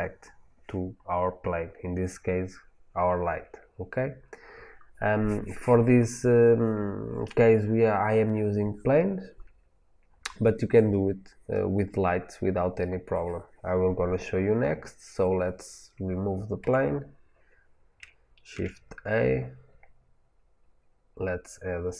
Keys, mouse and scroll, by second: 16.5 Delete, 18.4 shift+a.